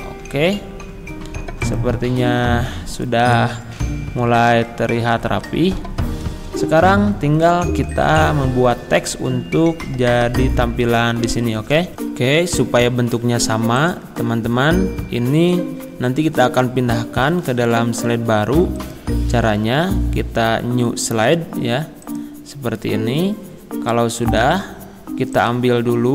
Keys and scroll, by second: 4.2 Left, 4.5 Down, 5.1 Left, 5.7 Down, 6.0 Right.